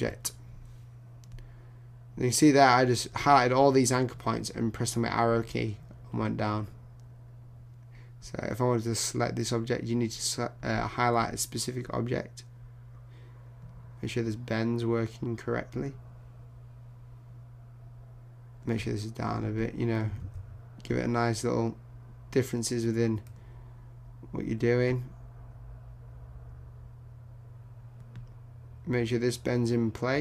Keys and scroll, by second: 20.2 super+z.